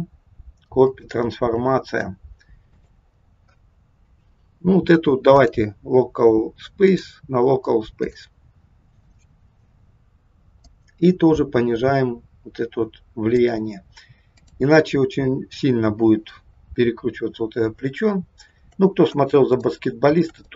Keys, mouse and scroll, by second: 1.6-2.3 scroll down 11, 2.8 click, 6.8 click, 10.6 click, 14.4 click, 17.9-18.5 scroll down 1, 18.6-19.1 shift+scroll down 2, 19.7 shift+middle click, 20.4 middle click.